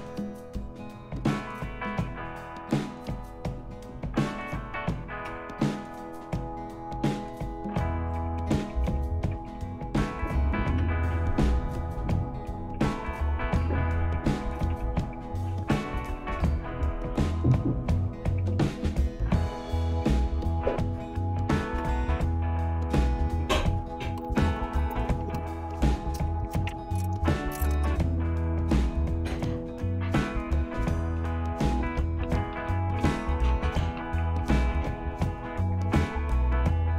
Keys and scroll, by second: 3.3 Down, 3.6 Down, 3.9 Down, 5.3 Return, 8.2 Up, 8.4 Up, 8.6 Up, 8.8 Up, 9.3 Up, 10.8 Return, 12.7 Down, 13.0-13.9 typing, 14.1 Down, 14.7 Down, 16.1 Down, 18.2 Up, 18.5 Up, 21.8 Return, 28.7 Return, 31.8-35.5 typing.